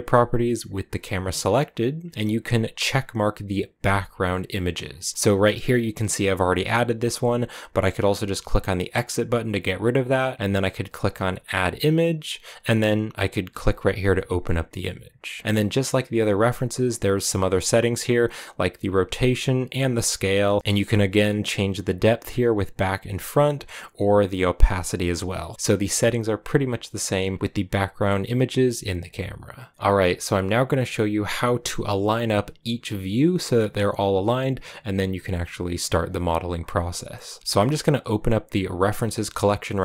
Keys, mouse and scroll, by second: 0.0 g, 2.7-15.4 drag, 18.0-29.7 drag, 29.7-39.8 shift+middle drag.